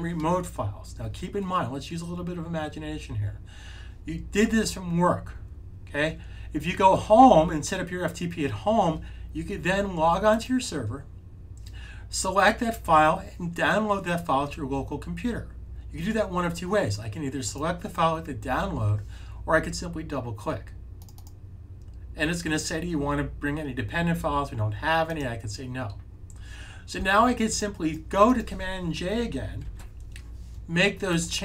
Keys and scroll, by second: 29.5 super+j.